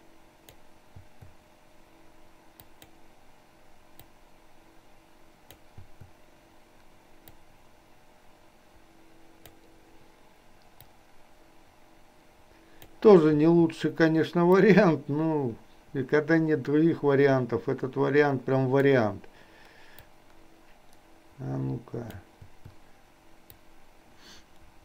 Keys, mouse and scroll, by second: 2.8 click, 4.0 click, 4.5-5.8 drag, 5.9 i, 7.4-9.6 drag, 10.9-13.0 drag, 13.4 i, 14.6-19.0 drag, 20.1-22.4 drag, 22.5 i, 23.6-24.8 drag.